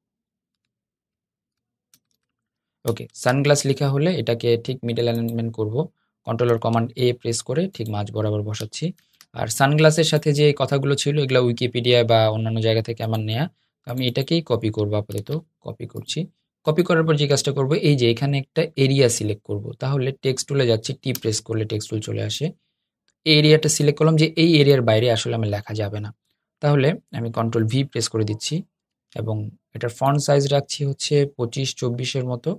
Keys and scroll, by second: 2.8 super+a, 4.2 super+a, 6.4 super+a, 8.7 super+d, 14.9 super+c, 19.6 t, 27.2 super+v, 28.6 super+a.